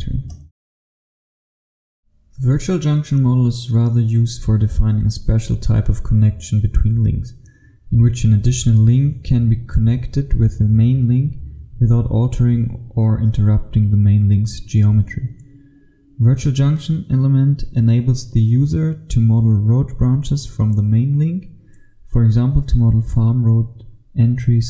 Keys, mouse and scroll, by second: 0.3 click, 2.2 click.